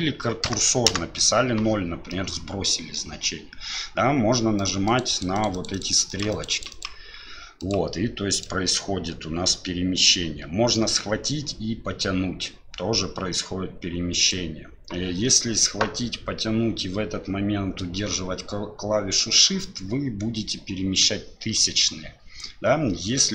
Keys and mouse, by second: 2.1 middle click, 4.9 click, 5.1 click, 5.3 click, 5.5 click, 5.7 click, 6.1 click, 6.3 click, 6.5 click, 6.7-8.4 drag, 10.8-14.3 drag, 15.3-23.3 drag.